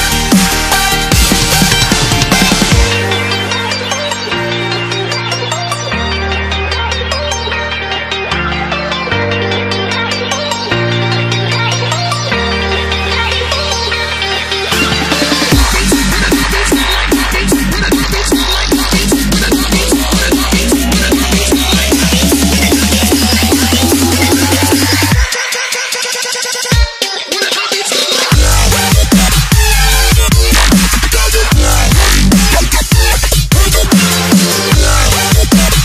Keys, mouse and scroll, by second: 0.6-1.0 alt+scroll up 2, 1.4 alt+scroll down 1, 1.7 click, 2.5-4.5 typing, 6.3 click, 7.8 scroll up 1, 8.6 click, 8.8-10.9 typing, 11.9 click, 12.3 scroll down 1, 12.6-13.2 scroll up 1, 15.2 click, 18.6 alt+click, 19.8 ctrl+v, 20.8 Down, 20.9 Return, 22.2 click, 23.3 click, 24.5 ctrl+v, 25.8 click, 26.1-26.5 alt+scroll down 2, 27.1-27.7 alt+scroll up 3, 28.0 click, 28.9 alt+Tab, 29.4 click, 31.0 ctrl+c, 31.4 Tab, 31.8 ctrl+v, 32.5 click, 33.5 click, 34.1 Delete, 35.1-35.8 scroll down 1.